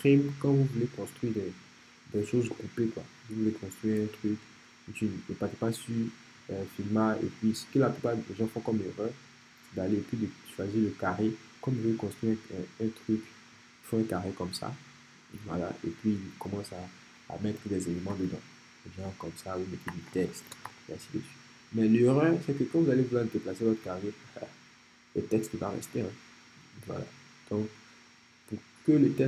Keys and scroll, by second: 18.1 t, 19.7-21.2 typing.